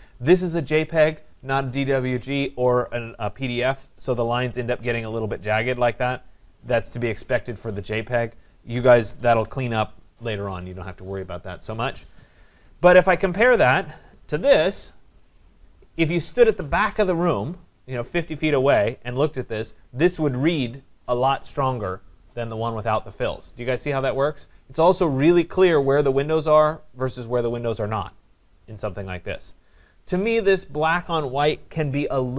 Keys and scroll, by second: 9.1 ctrl+c.